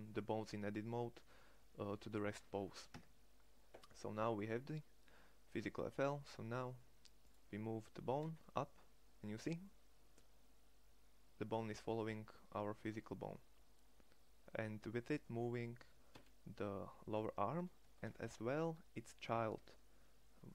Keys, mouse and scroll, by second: 2.5 Tab, 7.6 g, 17.5 g.